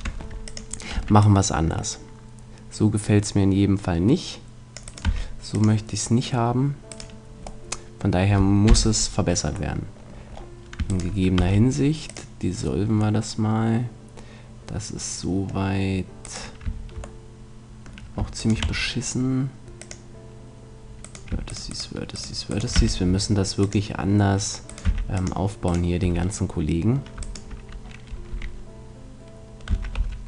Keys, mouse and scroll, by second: 1.0 c, 5.0 x, 6.9 right click, 7.7 middle click, 8.0 right click, 8.7 KP_Decimal, 10.9-11.9 middle drag, 11.4 x, 11.9 right click, 13.2-15.2 middle drag, 16.2-18.1 right drag, 17.2-18.4 middle drag, 18.6 x, 22.8 x, 24.7-28.9 right drag, 24.8 x, 26.0 a, 28.3 e.